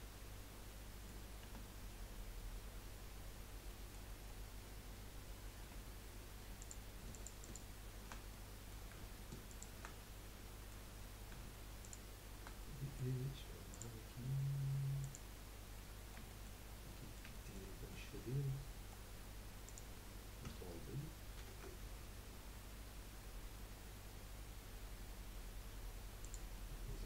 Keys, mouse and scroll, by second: 0.7 middle click, 1.4 Tab, 3.4 scroll down 2, 3.7 middle click, 4.1-5.2 scroll up 1, 5.2-5.6 scroll up 1, 5.6 2, 6.6 click, 7.1 alt+shift+click, 7.4 alt+shift+click, 8.3-9.5 middle drag, 9.5 alt+shift+click, 10.0 middle click, 10.9 scroll up 1, 11.8 shift+click, 12.6-14.0 middle drag, 15.1 middle click, 15.7 middle click, 16.6 scroll up 3, 17.0 middle click, 17.7 scroll up 1, 17.9-19.1 middle drag, 19.1 scroll up 1, 19.6 click, 21.4 ctrl+b, 26.5-27.0 middle drag.